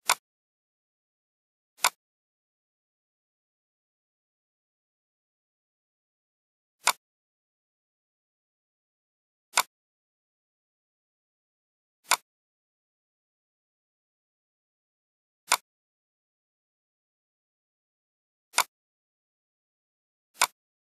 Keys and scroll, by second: 6.3 space.